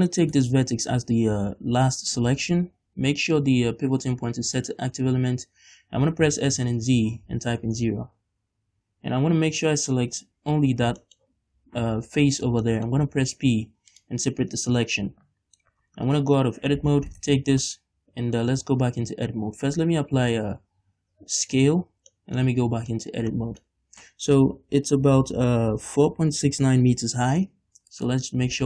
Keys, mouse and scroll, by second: 0.3 shift+right click, 3.0 ., 6.1 s, 7.8 Return, 8.7 a, 10.8 scroll down 1, 11.1-17.2 shift+middle drag, 11.3-12.7 scroll up 2, 12.7 scroll up 1, 13.7 p, 16.1 Tab, 17.2 right click, 17.7-22.5 middle drag, 18.6 Tab, 19.6 ctrl+a, 22.5 Tab, 23.0 shift+middle click, 23.4 middle click, 28.0 alt+right click, 28.5-28.6 scroll down 2.